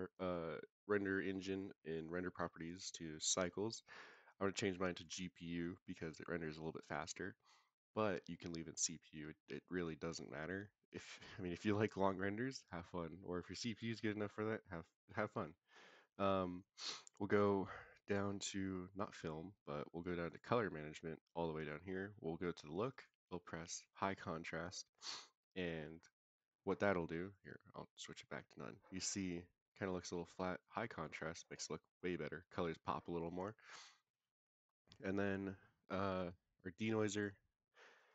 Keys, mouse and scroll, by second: 2.5-3.3 drag, 4.0-5.1 drag, 12.5-16.1 scroll down 3, 16.8 click, 17.3-18.9 scroll down 4, 18.9 click, 20.2 click, 20.6-22.1 scroll down 2, 22.1-22.9 scroll down 2, 22.9-24.2 drag, 27.3-28.4 drag, 29.7-30.6 drag, 34.5-36.8 scroll up 6, 36.8 click, 36.8 scroll up 1, 37.3-37.9 scroll down 2, 37.9-38.1 drag.